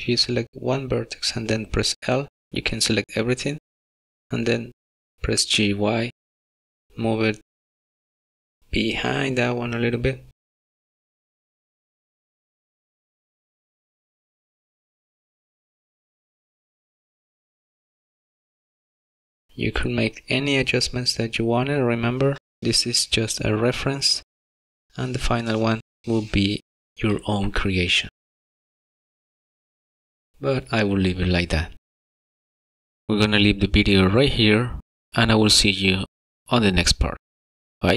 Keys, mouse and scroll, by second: 1.4 click, 3.4 l, 5.1 y, 7.3 g, 16.7 Tab, 18.8 click, 20.4 click, 33.6 space.